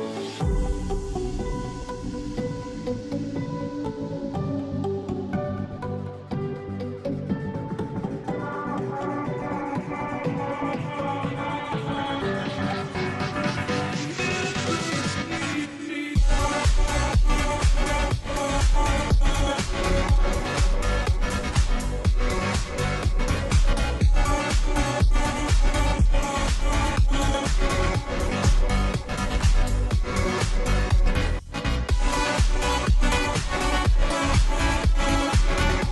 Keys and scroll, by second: 14.3 ctrl+t.